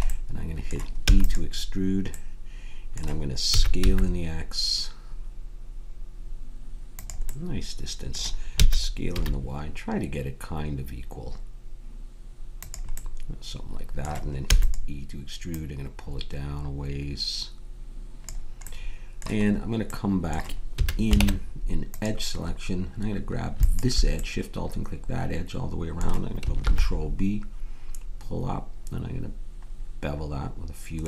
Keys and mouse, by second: 1.0 e, 3.4 s, 8.5 s, 14.5 e, 15.4-17.6 drag, 18.6-20.2 drag, 20.7 a, 21.2 ctrl+Tab, 25.3 middle click, 26.6 ctrl+b.